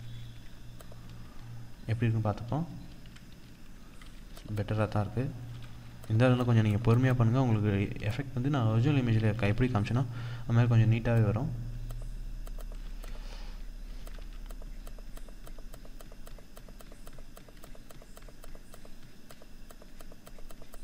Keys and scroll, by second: 1.7 ctrl+-, 2.7 ctrl+0, 3.5 ctrl+=, 7.4 ctrl+=, 8.9 ctrl+=, 11.3 ctrl+=.